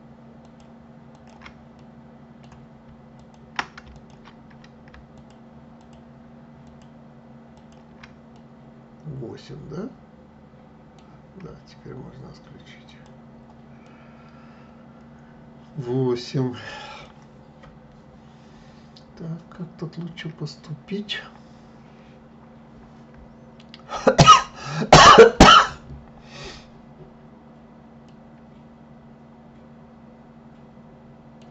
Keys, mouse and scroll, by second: 0.4 shift+click, 1.1 shift+click, 1.7-3.1 middle drag, 3.1 shift+click, 3.9 ctrl+click, 5.1 shift+click, 5.8 shift+click, 6.6 shift+click, 7.5 shift+click, 8.3-11.3 middle drag, 12.8 click, 13.8-16.8 middle drag, 28.0-31.1 middle drag.